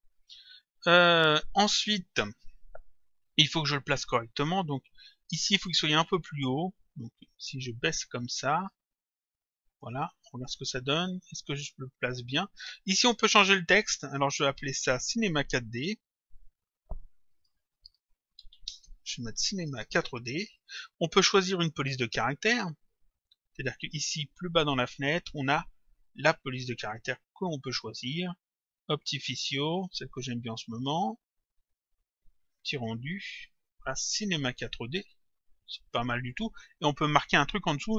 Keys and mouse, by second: 0.2 click, 7.5 click, 9.4 click, 13.2 click, 14.4 click, 15.8 click, 16.9-18.7 typing, 19.8 shift+d, 21.6 click, 22.8 click, 24.8 click, 27.0 click, 29.3 click, 30.8 click, 32.6 click, 34.8 click.